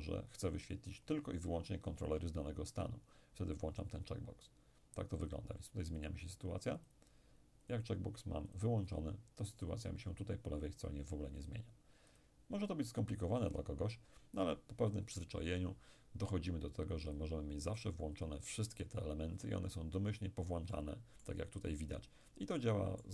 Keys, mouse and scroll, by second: 1.1 click, 5.2 click, 11.5 click, 17.2-18.2 drag, 20.7-22.2 middle drag, 22.6-23.1 middle drag.